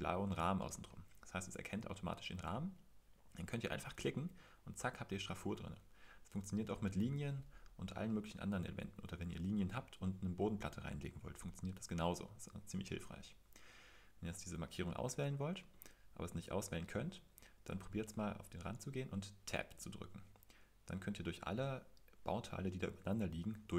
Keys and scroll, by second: 4.8 Escape, 19.8 Tab, 21.2 Tab, 22.4 Tab, 23.6 Tab.